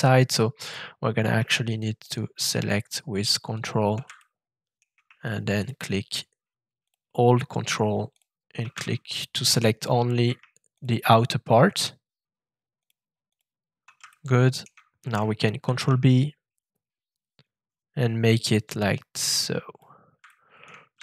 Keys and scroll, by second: 15.6 ctrl+shift+b.